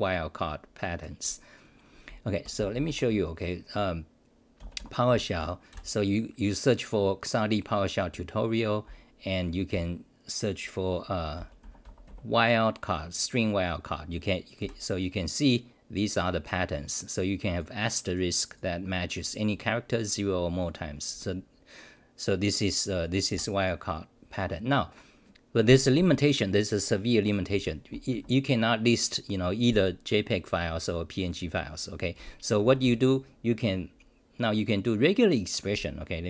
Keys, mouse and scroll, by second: 5.3 Return, 5.8 ctrl+r.